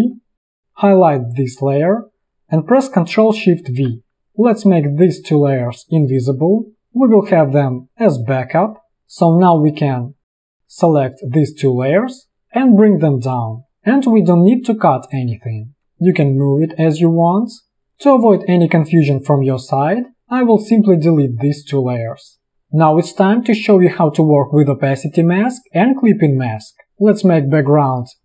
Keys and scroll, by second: 3.5 ctrl+shift+v, 9.0 space, 12.7 ctrl+shift+[, 13.8 space, 15.9 space, 17.8 space.